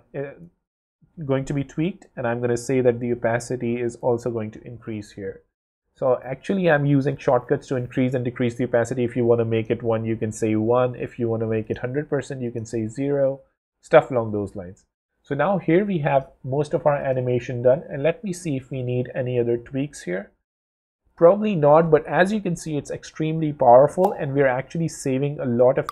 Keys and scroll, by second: 5.1 w, 14.4 w.